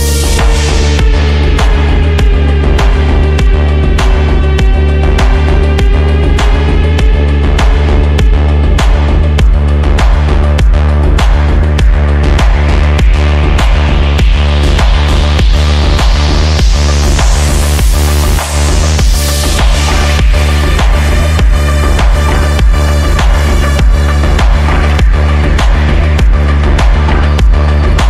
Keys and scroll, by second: 0.3 d, 4.1 f, 10.2 shift+Page_Up, 12.4 shift+F2, 13.0 F3, 16.4 Escape, 21.3 shift+Page_Down, 21.5 ctrl+Page_Up.